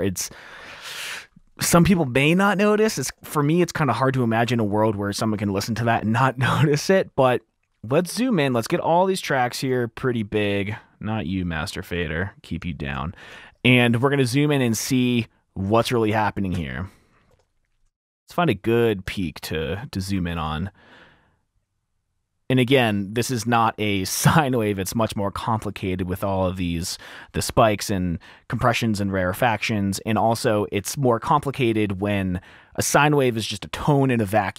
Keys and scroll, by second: 16.5 r, 16.6 r, 16.6 F7, 16.8 r, 19.0 t, 20.3 t, 20.9 t, 22.1-23.0 typing.